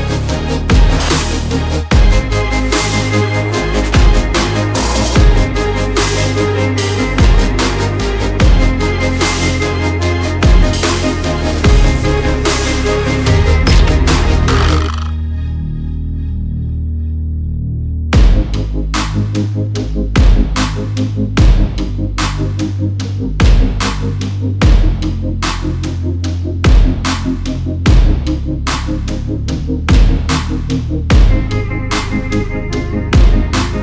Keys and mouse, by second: 0.7-3.9 drag, 3.9-9.7 middle drag, 5.6 BackSpace, 6.0 BackSpace, 6.4 BackSpace, 11.4-11.8 drag, 14.2 alt+h, 16.1 click, 16.7-17.2 shift+middle drag, 19.6 click, 20.2-20.9 middle drag, 22.3 r, 27.6-28.1 shift+drag, 29.5 r, 33.6-33.8 middle drag.